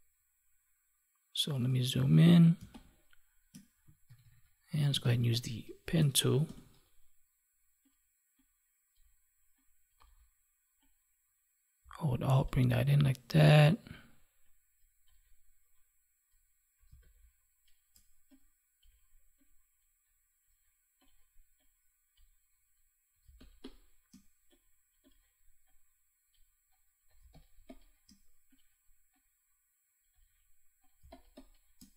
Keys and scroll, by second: 2.5 space, 4.0 ctrl+=, 16.8 space, 23.2 space, 27.2 space, 30.9 space.